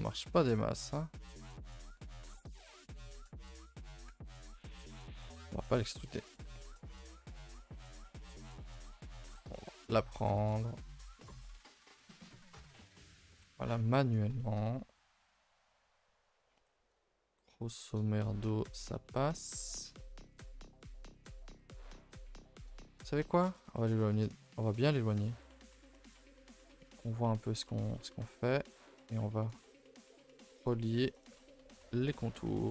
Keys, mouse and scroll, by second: 4.3 ctrl+z, 4.6-5.6 middle drag, 5.6 click, 6.6 shift+d, 7.3 s, 8.6 click, 9.0 s, 12.2-16.3 middle drag, 16.3 scroll down 1, 16.5-24.1 shift+middle drag, 24.1 g, 25.1 middle click, 25.4-25.8 scroll up 2, 25.6 shift+middle click, 25.8 a, 25.9 a, 26.4 2, 26.6 alt+click, 27.2 middle click, 27.6 a, 27.7 a, 27.9 middle click, 28.8 alt+click, 29.1 middle click, 29.9 alt+shift+click, 30.3 middle click, 31.1 alt+shift+click, 31.5-32.7 middle drag.